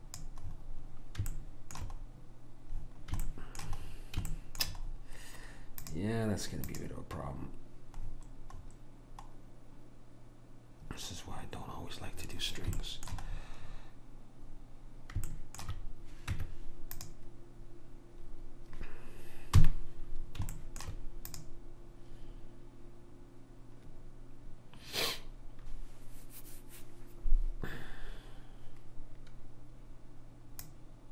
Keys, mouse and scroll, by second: 1.4 middle click, 6.0-8.6 drag, 8.6-12.9 middle drag, 16.4 Tab, 19.8 KP_1, 20.7-22.8 middle drag, 21.4 click, 21.4-22.8 right drag, 30.7 click.